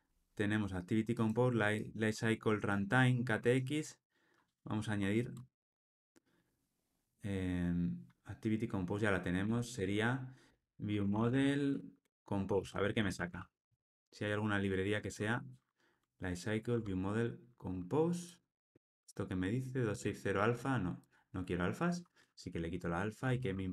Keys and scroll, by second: 16.7 Tab, 18.7 alt+Return, 23.3 alt+Return.